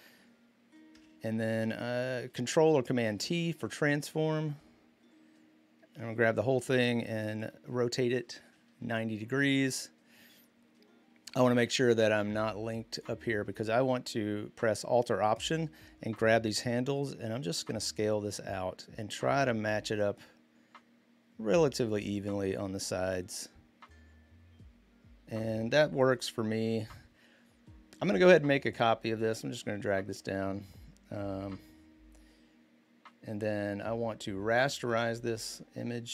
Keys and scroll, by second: 0.7 v, 2.8 ctrl+t, 25.8 Return.